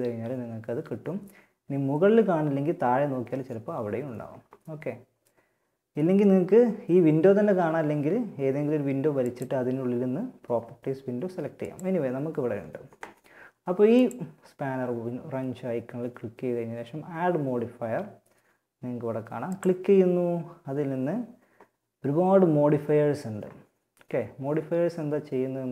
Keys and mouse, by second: 8.4-10.2 drag, 10.8-12.6 drag, 13.1-20.5 drag.